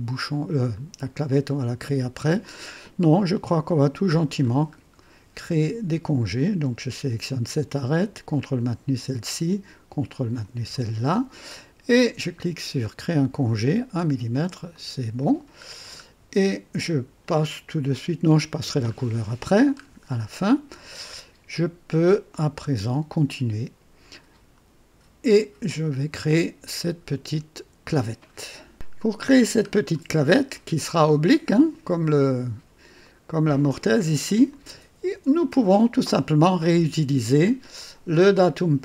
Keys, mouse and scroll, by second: 1.5-2.7 drag, 2.8 click, 3.4 typing, 4.0-4.6 drag, 4.7 scroll up 1, 8.3 ctrl+click, 10.1 ctrl+click, 13.0 click, 14.7 click, 15.6-16.0 scroll down 1, 17.2 click, 18.3 click, 18.9 scroll up 1, 19.5-19.8 scroll down 1, 19.8 scroll up 1, 20.1-24.5 drag, 28.7 click, 29.6-30.0 scroll down 2, 30.5-31.5 drag, 33.0 click, 34.5 click, 35.5 click, 36.8 scroll up 2, 37.9 scroll down 2.